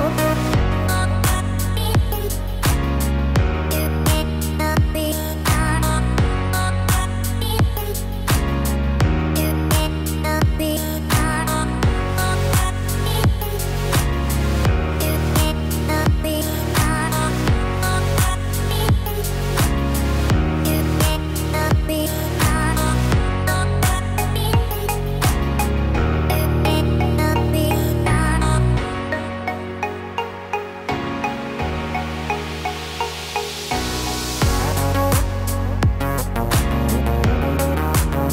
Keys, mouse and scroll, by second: 1.8 ctrl+r, 5.3 click, 5.7 click, 6.7 z, 9.5 g, 16.7 Tab, 17.1 click, 17.6 scroll down 3, 18.0 middle click, 19.5-20.3 scroll up 8, 21.1 click, 24.8 scroll down 2, 25.1 middle click, 26.3-27.1 scroll up 1, 27.1 Tab, 29.1 click, 29.3 click, 30.7 ctrl+b, 36.0 middle click, 36.7-37.3 scroll up 2, 37.1 middle click, 37.8-38.3 scroll up 1.